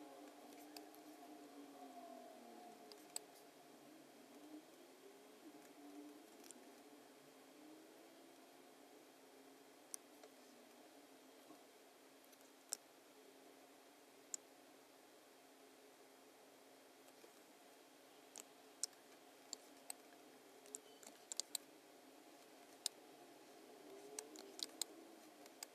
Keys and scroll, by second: 0.5 space, 2.9 space, 6.4 a, 19.5 space, 20.6 alt+b, 21.4 space, 22.7 space, 23.9 space, 24.6 space, 25.4 space.